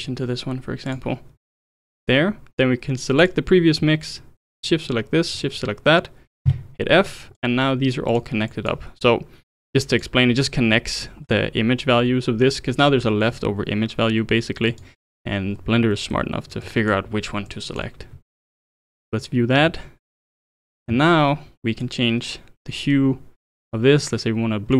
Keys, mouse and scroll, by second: 3.2 click, 4.5 shift+click, 5.3 shift+click, 6.4 f, 7.1-8.2 drag, 8.5 click, 9.9 click, 11.2 scroll up 3, 14.7 click, 15.1-15.6 middle drag, 15.6-15.9 scroll down 3, 15.9-16.6 middle drag, 16.6 click, 17.5-18.6 drag, 19.6 scroll up 3, 21.8-24.7 drag.